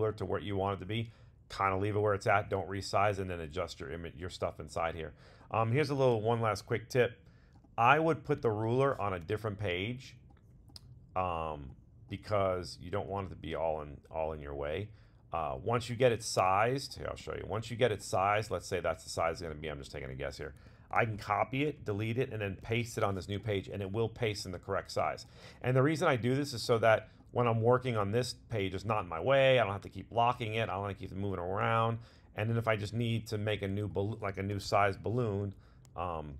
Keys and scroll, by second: 6.1 super+c, 8.4 super+v, 20.9 super+c, 22.6 super+v.